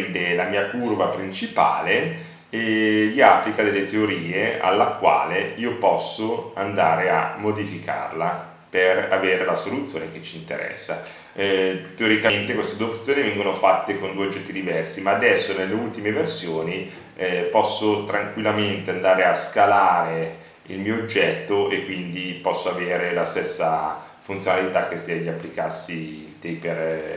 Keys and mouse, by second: 0.3 ctrl+z, 2.2 s, 5.0 ctrl+z, 5.6 Tab, 12.1 s, 14.0 ctrl+z, 16.2 Tab, 18.1 Tab, 20.3 e, 27.0 Tab.